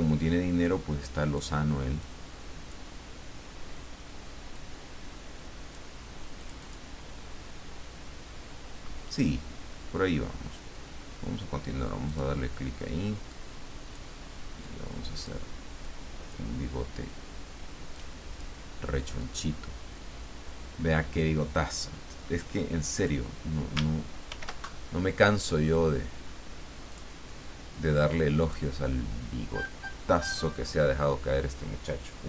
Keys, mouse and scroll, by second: 0.6-1.6 drag, 2.0 click, 4.5-5.9 drag, 6.4 click, 12.1 click, 13.3 click, 14.6 click, 15.8 click, 17.9 click, 19.2 click, 23.0 click, 24.3 ctrl+shift+f, 26.9 click, 28.4 click.